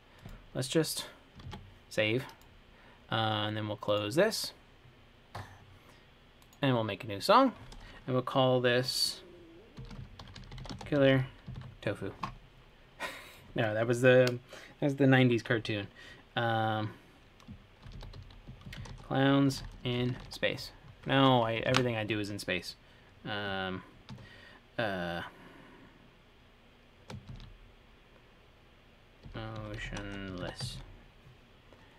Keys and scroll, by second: 1.7 super+s, 10.0-10.8 typing, 14.1 typing, 17.9-20.9 typing, 22.0 shift+super+Left, 22.0 typing, 27.5 shift+m, 29.3-31.2 typing.